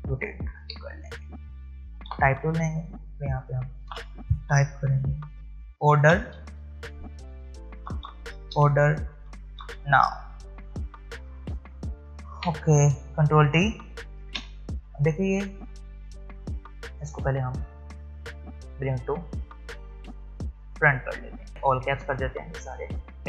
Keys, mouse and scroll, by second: 0.6 v, 2.1 t, 3.0 click, 4.8-9.6 typing, 6.8 click, 13.0-13.7 typing, 14.2 ctrl+t, 16.9 right click, 18.2 click.